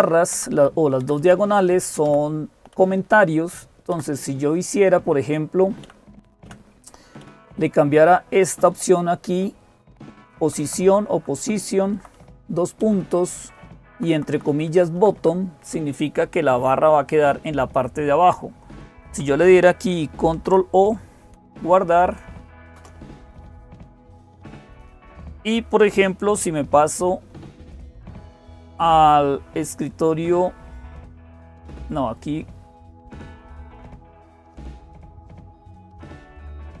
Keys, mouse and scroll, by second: 0.0-36.8 typing, 0.1 Right, 0.3 Right, 0.8 Left, 1.0 Left, 1.9 Down, 2.5 Right, 3.7 Left, 5.6 Delete, 6.2 Delete, 7.0 Delete, 8.3 Right, 8.5 Right, 9.1 Right, 9.3 Right, 10.0 Right, 10.6 Right, 11.8 Right, 12.6 Right, 13.7 Right, 13.9 Right, 15.0 Right, 18.1-18.9 Left, 21.0 ctrl+o, 22.6 Return, 33.5 click, 36.5 click.